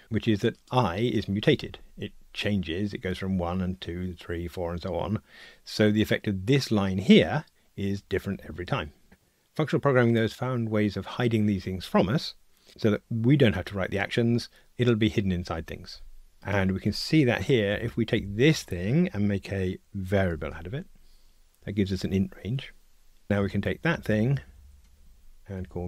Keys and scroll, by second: 17.7 alt+Up, 23.3 super+z, 25.2 super+z.